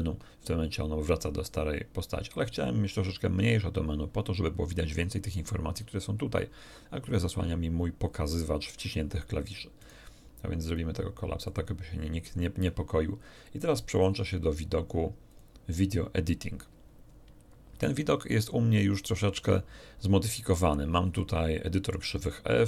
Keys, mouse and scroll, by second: 9.7 middle click, 10.7 click, 11.4 click, 13.9 click, 15.3 click, 21.1-22.4 middle drag.